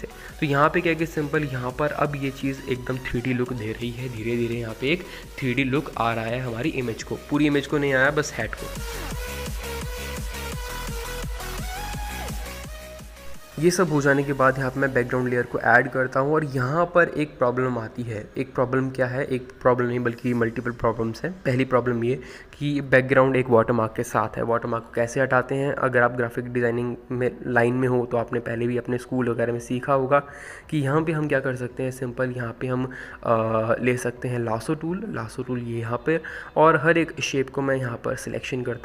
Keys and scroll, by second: 17.8 ctrl+g, 19.0-19.7 typing, 20.9-23.5 typing.